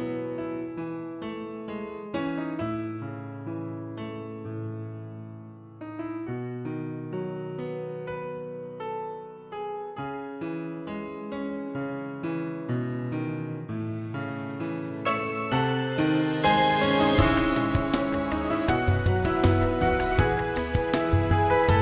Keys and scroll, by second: 1.9 s, 6.4 a, 6.8 s, 8.4 g, 17.4 a, 17.7 s, 19.7 g.